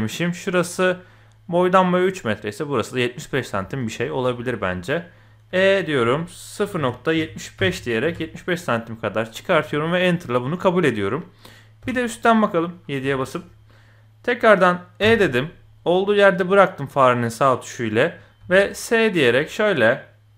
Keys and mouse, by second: 3.6 shift+click, 4.3 shift+middle click, 5.5 e, 9.8 shift+middle click, 11.8 KP_7, 13.1 shift+click, 15.0 e, 18.4 s.